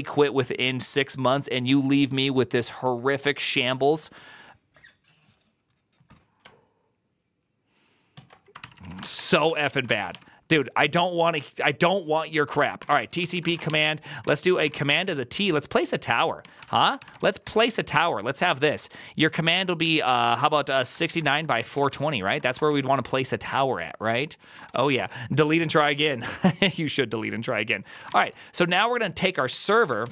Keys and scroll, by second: 8.5 alt+{, 8.5 ctrl+c, 8.6-10.5 typing, 12.6-14.9 typing, 14.7 ctrl+c, 16.0-17.5 typing, 21.4-23.0 typing, 21.9 ctrl+c, 24.4-25.2 typing, 27.7-30.1 typing.